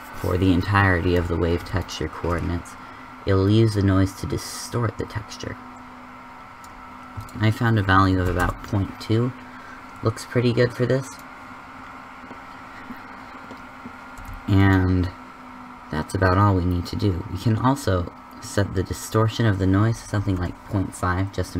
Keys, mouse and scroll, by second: 1.7-7.1 drag, 11.7-12.5 middle drag, 12.5 click, 12.7 middle click, 14.5 middle click, 18.9-19.9 middle drag.